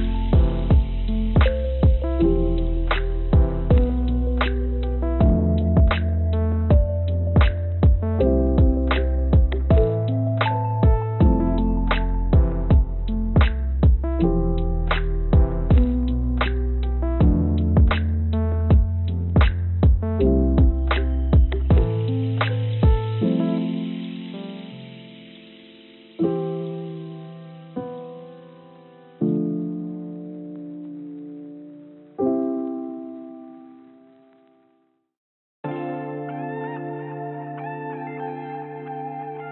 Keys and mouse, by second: 2.8 g, 8.2-12.1 drag, 12.8 click, 14.6 g, 19.5-22.4 drag, 22.8 s, 24.6 click, 25.5 g, 27.1 click, 27.3 click, 28.9-30.1 drag, 30.5 g, 34.3 click, 34.7-37.0 drag, 37.4-38.9 drag.